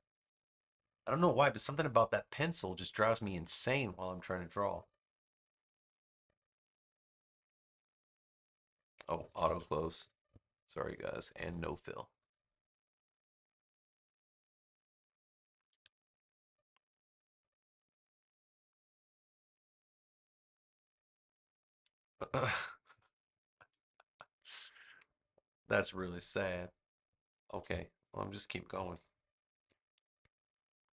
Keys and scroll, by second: 9.4 super+z, 22.2 v, 23.9 space, 30.0 n.